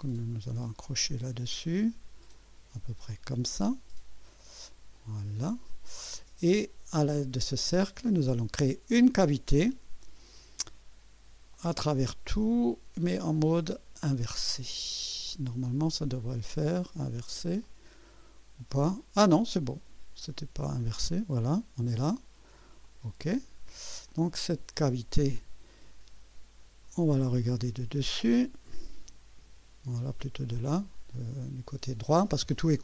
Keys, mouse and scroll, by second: 0.4 click, 3.0 click, 4.9 click, 8.9 click, 11.5 click, 12.2 click, 14.0 click, 15.3-16.4 drag, 17.6 click, 20.6 scroll up 2, 21.1 right click, 22.8 click, 24.1-25.9 drag, 27.5 2, 28.4 1, 29.4 KP_4, 30.5 scroll up 2, 31.1 right click.